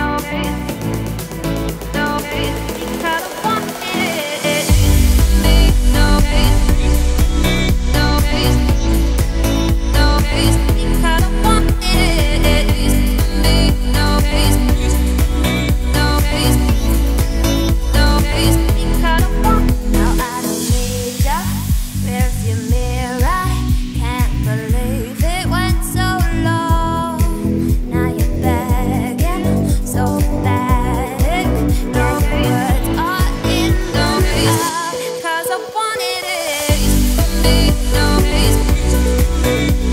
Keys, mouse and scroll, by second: 1.2 shift+n, 1.5 Tab, 1.9 ctrl+a, 2.8 Tab, 3.6 i, 6.1 z, 6.5 `, 7.1-7.5 scroll up 2, 7.5 e, 8.9 z, 9.1 scroll down 1, 9.2 middle click, 10.0 click, 10.3-13.0 middle drag, 13.0 scroll down 1, 13.0-14.1 middle drag, 14.1 click, 14.4-14.9 scroll up 2, 14.9 x, 16.2 Tab, 16.7 click, 17.0-17.9 scroll up 3, 17.9 g, 19.3 click, 19.6 Tab, 19.6 scroll down 2, 19.8 middle click, 20.2 `, 20.7 z, 21.4 click, 21.8 z, 22.8 i, 29.7 scroll up 1, 29.8 x, 30.9 scroll down 1, 31.1 middle click, 31.9 2, 32.1 click, 33.2 shift+click, 34.0 f, 34.2-35.4 middle drag, 35.4 click, 35.9 shift+click, 36.3 f, 36.5 middle click, 37.4 click, 38.0 shift+click, 38.3 f, 38.5-39.9 middle drag.